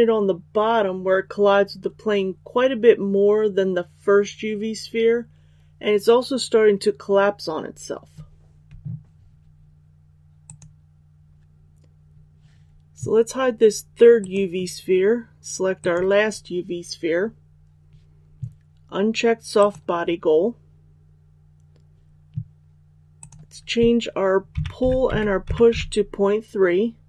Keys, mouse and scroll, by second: 15.7 right click, 19.5 click, 24.5 KP_Decimal, 24.8 KP_3, 25.0 Tab, 25.4 KP_Decimal, 25.6 KP_3.